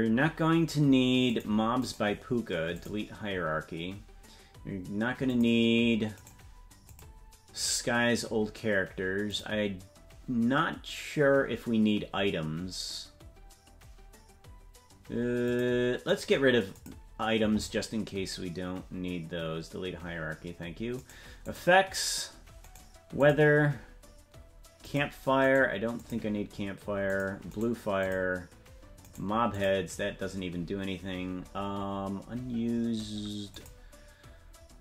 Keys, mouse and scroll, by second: 0.1-1.3 scroll up 2, 1.3 click, 1.8 right click, 5.2 click, 6.1-9.2 right drag, 9.2-20.4 drag, 24.8-27.5 drag, 24.8 right click, 27.5-29.9 right drag, 33.5-34.8 drag.